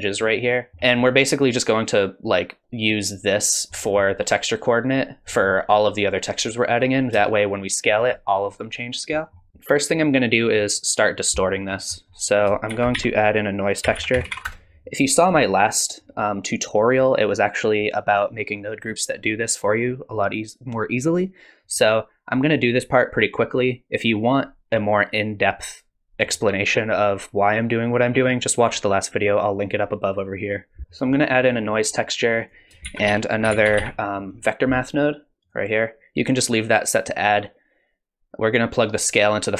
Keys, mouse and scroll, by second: 0.7 middle click, 3.8 middle click, 5.3 middle click, 7.3 shift+click, 9.1 middle click, 9.5 middle click, 9.5-9.9 scroll down 4, 11.7-12.3 scroll up 4, 12.0 middle click, 12.3 click, 12.7 shift+a, 22.3 click, 30.8 click, 30.8 middle click, 30.8-31.9 scroll down 4, 31.9-32.5 scroll up 2, 32.4 click, 32.9 shift+a.